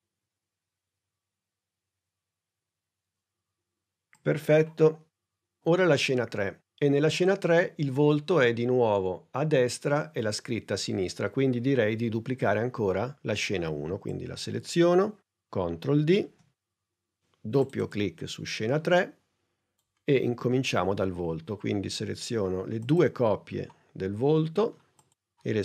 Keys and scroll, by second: 16.1 super+d.